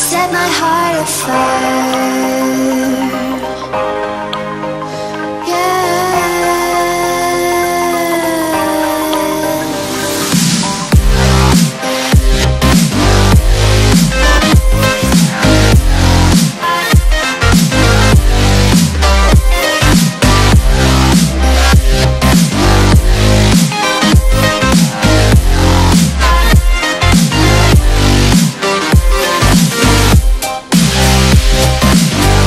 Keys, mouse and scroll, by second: 5.1 Left, 9.3-12.8 drag, 14.6 space, 14.7-15.2 click, 15.0 space, 15.9 click, 16.8-18.5 alt+drag, 19.3 right click, 20.2 click, 23.0 click, 25.1 shift+Down, 26.8 shift+Down, 27.7 click, 28.3-30.0 alt+drag, 30.1 right click, 30.8 click.